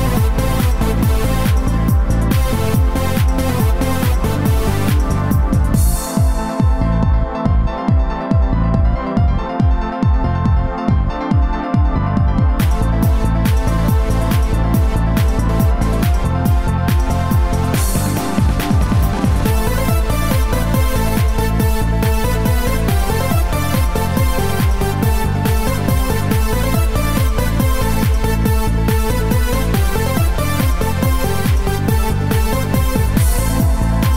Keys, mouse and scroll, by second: 1.9 click, 4.7 click, 12.5 click, 14.2 click, 15.2-15.6 scroll down 2, 15.9 scroll down 2, 24.5 click, 31.6 click, 33.0 click.